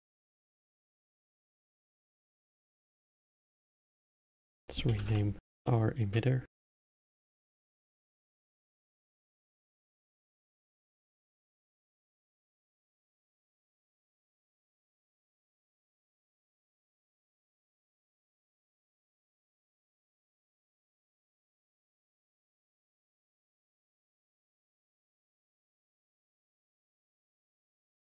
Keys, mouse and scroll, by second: 2.5-4.1 middle drag, 4.1 click, 4.2-7.3 drag, 11.0 t, 14.7 drag, 19.7 click, 20.6 click, 23.3 middle click, 23.8 scroll down 4, 24.4-26.8 middle drag, 26.8-28.0 scroll up 6.